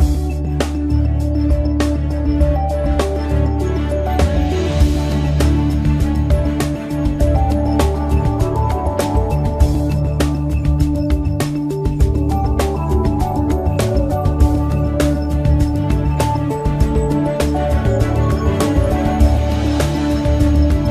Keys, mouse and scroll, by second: 0.0-2.3 right drag, 1.7 m, 2.3 drag, 3.8 right click, 4.8 click, 4.8 x, 5.0 right click, 5.4 click, 6.1-8.0 drag, 15.7-17.2 middle drag, 18.0 shift+a.